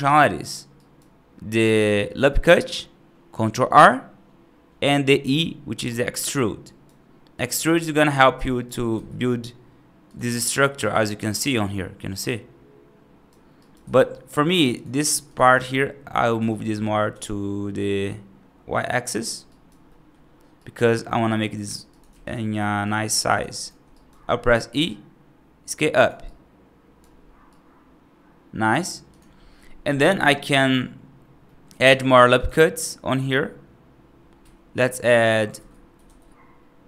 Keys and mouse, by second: 0.6 right click, 6.5 right click, 8.2 right click, 8.8 e, 10.7-13.1 right drag, 13.5 right click, 13.8 ctrl+z, 14.9 2, 15.2 click, 16.2 g, 19.3 right click, 19.7 middle click, 20.4 right click, 21.2 click, 21.5 3, 22.4 shift+click, 23.8 right click, 24.5 e, 26.1 right click, 27.4-28.6 right drag, 30.1 right click, 31.3 middle click, 31.7 ctrl+r, 35.4 ctrl+z, 35.9 ctrl+r.